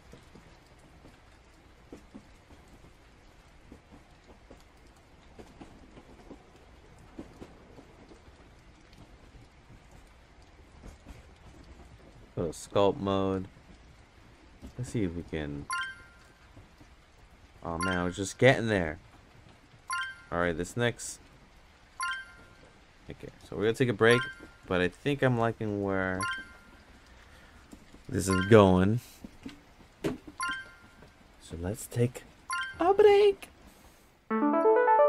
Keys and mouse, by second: 3.1 click, 3.8 click, 4.4 click, 5.7 click, 6.5 ctrl+z, 6.8 click, 8.0 click, 10.7 Tab, 12.1-14.0 drag, 15.7-16.1 drag, 17.3 click, 18.3 f, 20.9 click, 21.3 drag, 22.9-23.3 drag, 24.3 Tab, 25.1 Tab, 25.7-26.5 drag.